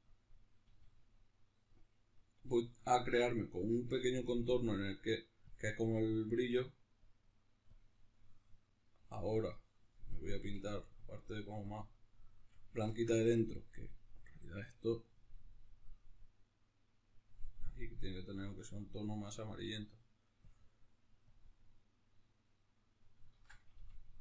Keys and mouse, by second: 0.4 f, 10.2 f, 11.6-14.5 drag, 12.6 ctrl+z, 16.0-24.2 drag, 23.1 ctrl+z, 23.5 f.